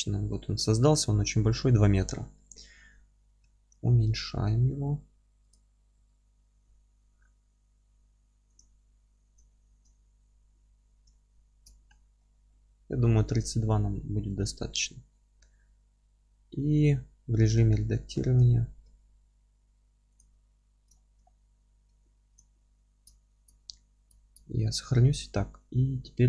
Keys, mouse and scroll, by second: 0.5-1.4 scroll up 1, 1.4-5.5 middle drag, 1.9-2.4 scroll up 2, 2.6-3.5 scroll up 2, 3.5 s, 5.5 click, 5.7 scroll up 1, 6.0 z, 8.6 click, 8.8 z, 9.5-18.4 alt+middle drag, 10.0-10.4 scroll down 1, 10.7 alt+z, 11.8-12.2 scroll up 1, 12.5 scroll down 1, 12.8 Tab, 14.4 alt+q, 16.2 Tab, 17.1 F3, 17.6 1, 18.4 click, 18.8 g, 20.2 click, 20.5 F3, 21.0-22.4 alt+middle drag, 21.3-21.6 scroll down 2, 21.9 Tab, 22.4 click, 22.6-26.2 middle drag, 22.8-24.9 scroll up 2.